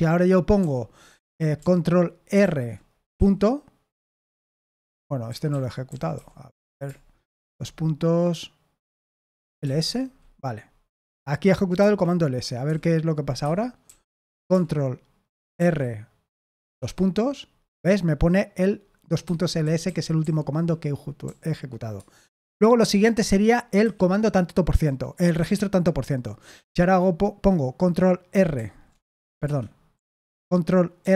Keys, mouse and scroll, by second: 0.5 o, 2.4 ctrl+r, 3.1 ., 4.4 Escape, 5.0-6.6 typing, 9.2-10.1 typing, 11.7 Escape, 12.6 i, 13.3 Escape, 13.8 o, 15.5 ctrl+r, 19.2 Escape, 19.3-21.2 typing, 23.8 Escape, 28.5 ctrl+r, 29.4 Escape, 29.9 i, 31.0 ctrl+r.